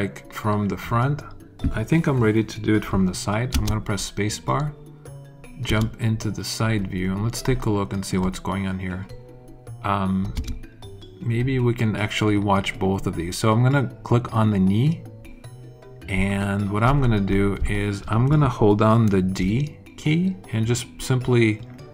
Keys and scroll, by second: 3.4 space, 5.6 space, 10.3 space, 19.3 d.